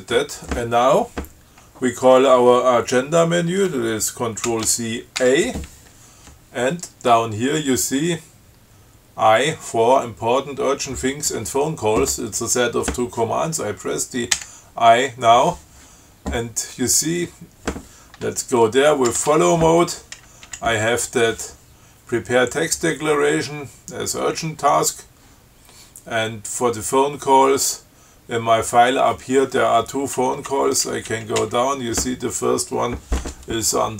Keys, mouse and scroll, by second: 4.7 ctrl+c, 14.6 i, 19.3 shift+f, 20.7 Down, 30.6 Down.